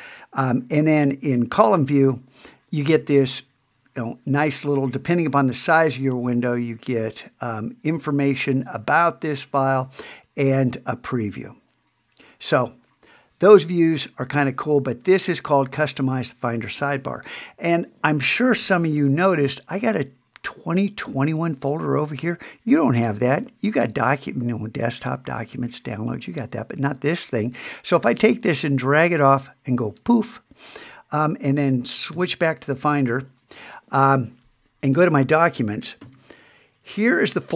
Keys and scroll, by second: 1.0 super+3, 32.1 super+Tab.